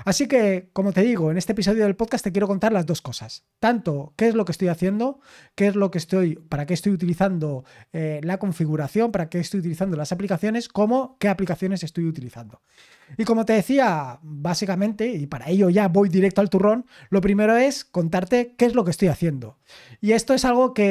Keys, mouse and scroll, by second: 12.3-12.7 scroll down 6.